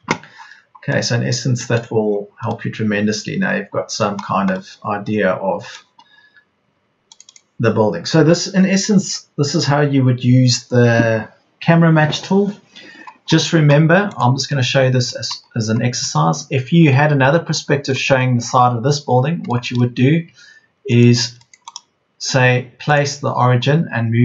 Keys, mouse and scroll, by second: 6.6 Escape, 15.7 Escape, 18.7 Escape.